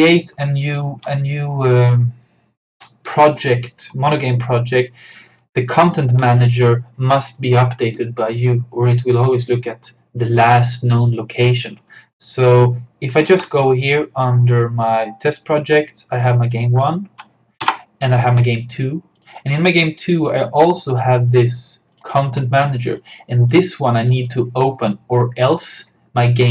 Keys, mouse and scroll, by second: 0.8 alt+click, 13.2 super+Num_Lock, 13.3 super+d, 15.3 click, 17.7 BackSpace, 18.3 click.